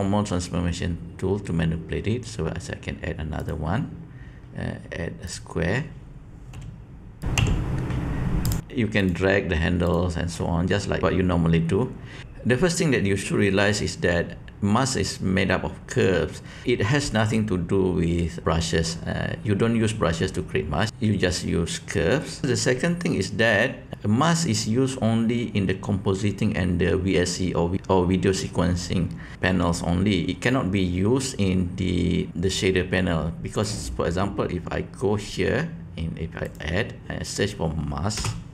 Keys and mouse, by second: 3.4-5.2 drag, 6.5 g, 7.2 r, 7.3 s, 9.8 click, 10.3-12.2 drag, 33.4 click, 36.4-38.5 drag.